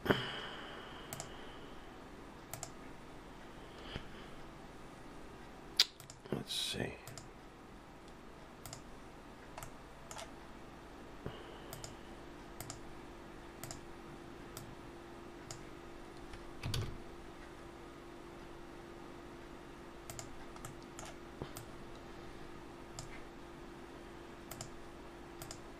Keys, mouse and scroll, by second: 1.1 click, 1.7-2.5 scroll down 1, 2.5 click, 6.0 click, 9.6 middle click, 11.7 click, 12.6 click, 13.6 click, 16.8 shift+a, 20.6 middle click, 21.6 click, 24.5 click, 25.4 click.